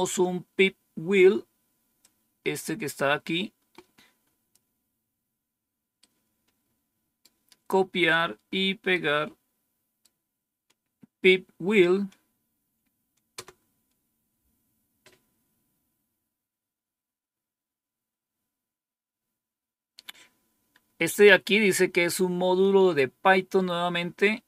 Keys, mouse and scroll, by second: 1.9-4.5 drag, 5.9-7.1 right drag, 8.8-10.0 right drag, 13.2 Return.